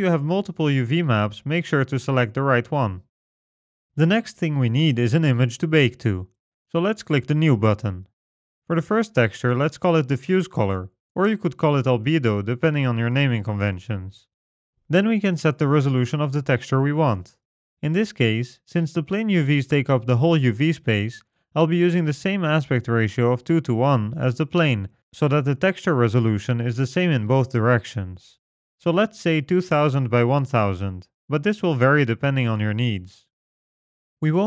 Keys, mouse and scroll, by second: 0.7 click, 4.3 Tab, 7.5 click, 10.8 f, 29.6 KP_0, 29.8 KP_0, 31.3 KP_0, 31.4 KP_0.